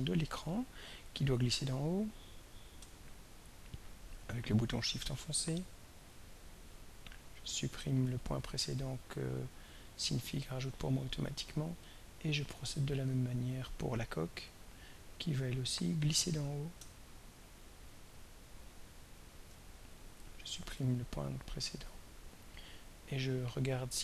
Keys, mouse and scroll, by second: 0.3 click, 2.4-5.2 drag, 8.1 right click, 10.0 click, 11.8 click, 14.3-14.7 scroll up 1, 16.6-18.8 drag, 20.7 right click, 22.2 click, 23.7-24.0 drag.